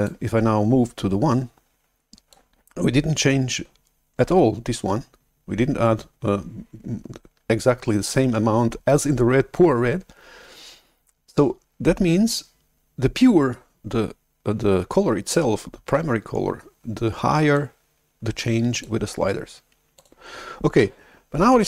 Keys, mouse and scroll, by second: 0.0-2.3 drag, 17.5-21.6 drag.